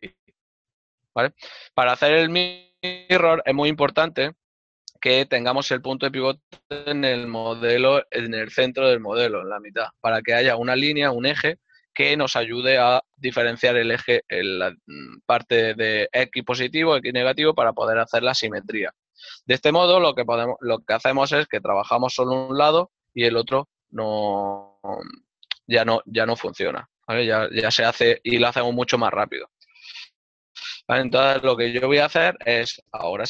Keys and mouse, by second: 3.6 click, 7.3 ctrl+middle click, 17.3 ctrl+middle click, 18.9 ctrl+middle click, 19.9 z, 20.9 click, 21.4 right click, 22.4 g, 26.8 click, 29.4 middle click.